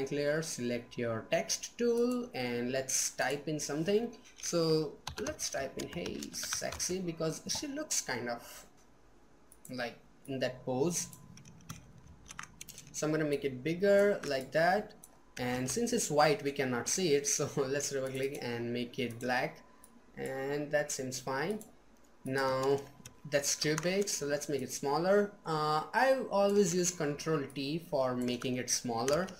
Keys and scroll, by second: 26.7 ctrl+t.